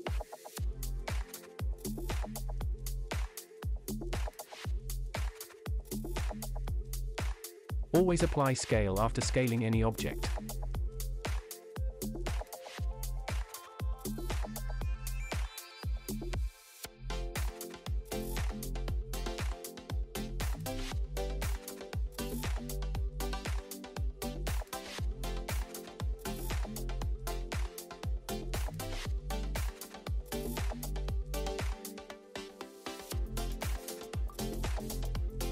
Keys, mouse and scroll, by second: 0.1 scroll up 1, 0.8 click, 1.3 middle click, 1.7 shift+middle click, 2.8 click, 5.7 Tab, 6.5 ctrl+a, 9.0 scroll up 1, 9.5 Tab, 10.5 middle click, 10.8 scroll up 1, 11.2 shift+middle click, 12.5 e, 12.5 Return, 14.0 click, 14.2 click, 15.3 scroll up 2, 15.6 shift+middle click, 17.8 alt+click, 19.4 e, 19.5 Return, 23.8 s, 24.0 shift+z, 27.4 click, 28.1 click, 28.5 shift+middle click, 29.8 i, 32.0 click, 32.4-33.1 scroll down 1, 33.5 e, 33.6 Return, 34.9 click.